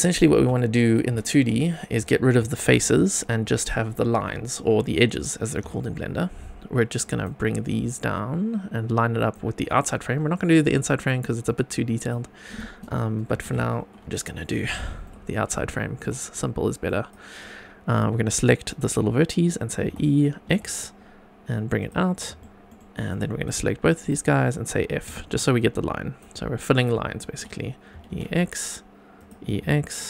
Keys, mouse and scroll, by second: 0.3 q, 4.2 Tab, 5.6 1, 6.9 click, 7.8 click, 11.4 click, 13.3 x, 14.1 shift+middle click, 15.2 scroll up 2, 15.6 shift+middle click, 16.8 click, 19.8 e, 20.4 x, 21.7 click, 22.1 scroll down 2, 22.4 shift+middle click, 22.7 shift+scroll down 1, 22.8 shift+middle click, 23.1-24.7 shift+drag, 24.7 scroll up 2, 25.0 f, 25.5 click, 26.6 shift+middle click, 27.9 e, 28.1 x, 29.1 click, 29.4 e, 29.6 x.